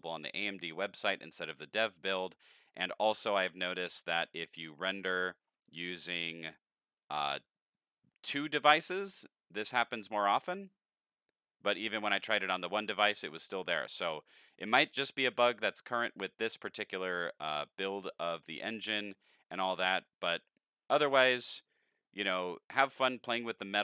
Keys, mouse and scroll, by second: 3.4 click, 4.4 click, 5.5 click, 5.8 click, 6.9 click.